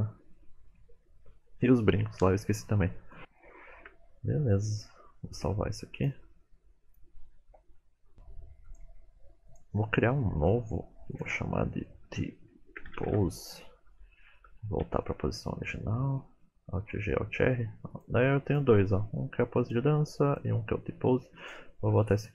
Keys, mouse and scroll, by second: 1.1 middle click, 3.2 KP_1, 3.4 shift+middle click, 4.1 scroll down 1, 4.7-5.5 scroll down 2, 6.0 click, 7.8 shift+middle click, 8.6 click, 14.2 shift+middle click, 14.5-15.0 scroll down 4, 14.9 a, 16.0 alt+g, 16.1 alt+r, 17.9 click.